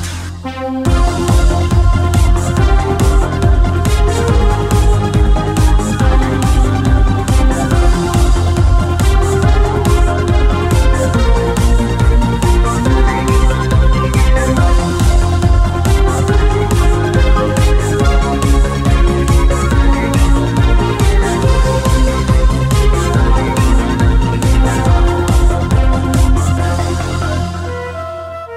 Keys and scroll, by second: 10.6 g, 22.6 w, 27.3-28.5 typing.